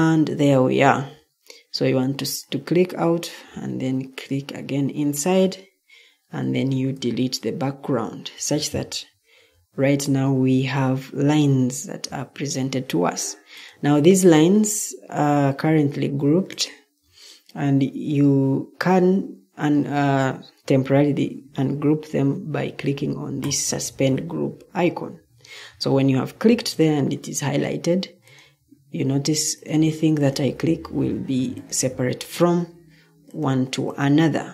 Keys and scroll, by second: 6.9 Delete.